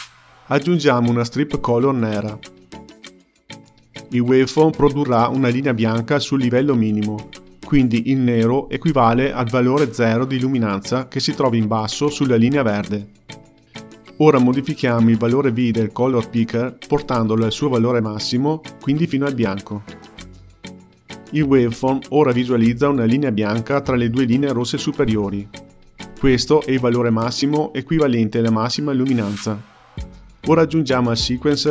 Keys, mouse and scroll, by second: 0.3 shift+a, 13.9 click, 15.6 click, 16.5 click, 31.0 shift+a.